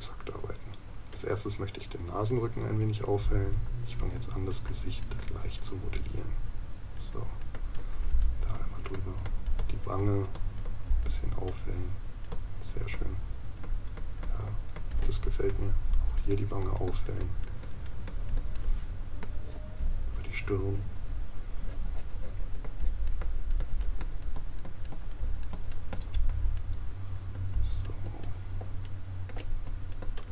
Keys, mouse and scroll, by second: 28.8 right click.